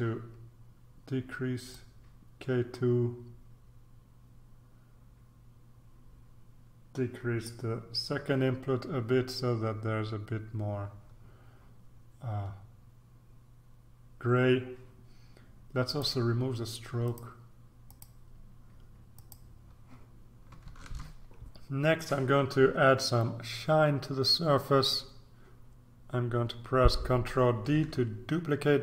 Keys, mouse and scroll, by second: 1.7-8.0 drag, 15.9 click, 17.1 click, 17.9 click, 19.1 click, 21.0 ctrl+r.